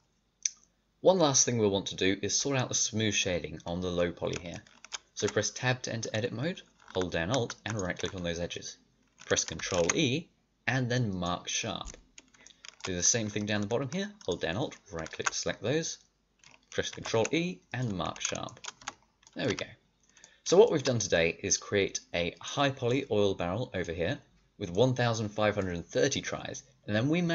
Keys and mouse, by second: 0.0 ctrl+z, 0.0 Tab, 4.0-5.1 middle drag, 5.1 Tab, 9.5 ctrl+e, 14.1-16.1 drag, 16.1-18.4 middle drag, 16.9 ctrl+e, 18.7 Tab, 19.4 a, 22.3 middle click, 22.9 middle click, 23.3 click, 24.1-27.3 middle drag.